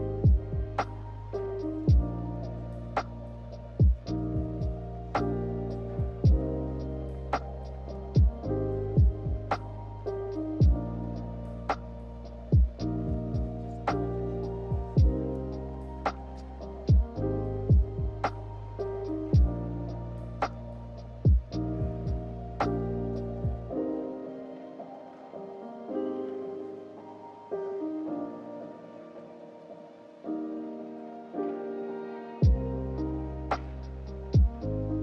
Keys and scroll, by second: 3.5 k, 14.1 8, 14.3 Return, 15.5 5, 15.6 Return, 18.0-19.0 typing.